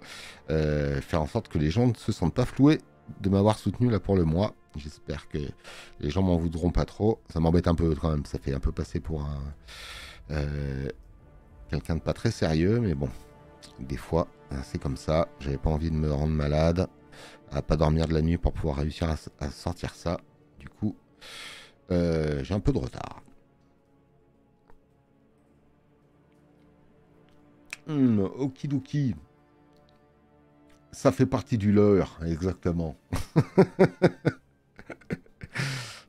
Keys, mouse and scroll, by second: 12.4 space, 14.2 space, 14.4 click, 21.4 space, 21.6 click, 28.4 space, 28.8 click.